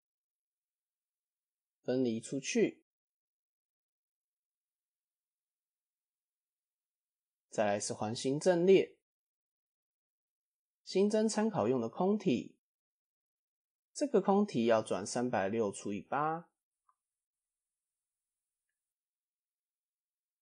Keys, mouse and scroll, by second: 0.1 click, 0.5 3, 0.7 click, 1.2 shift+click, 2.5 p, 3.3 Tab, 5.3 click, 5.8 middle drag, 6.0 scroll down 1, 6.4 KP_1, 7.3 click, 8.5-8.9 scroll up 2, 8.9 shift+a, 14.6-17.7 drag, 18.4 click, 19.0 click.